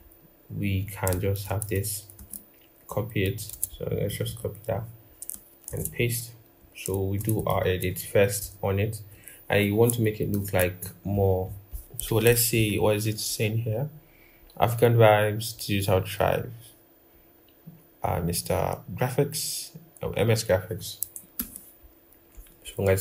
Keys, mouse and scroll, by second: 1.9 ctrl+c, 2.8 typing, 3.3 ctrl+z, 4.0 double click, 4.6-5.1 scroll, 5.5 typing, 7.3 ctrl+=, 7.4 ctrl+=, 10.1 ctrl+-, 11.3-11.7 scroll, 14.2-15.1 scroll down 1, 21.1 ctrl+-, 22.2 ctrl+-.